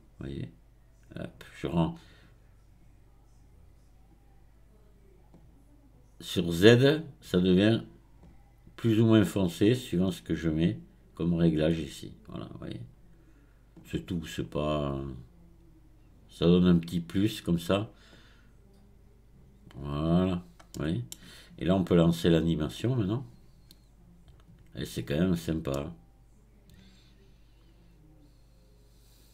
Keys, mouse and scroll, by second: 6.3-12.3 drag, 14.9-17.9 drag, 18.1-20.2 drag, 20.2 scroll down 3, 20.7-22.8 middle drag, 22.8-25.7 drag, 25.7-28.7 middle drag.